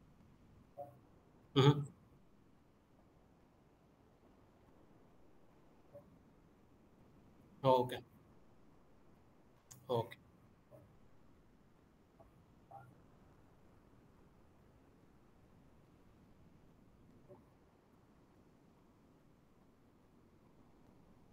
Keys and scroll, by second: 17.9 w, 20.0 d.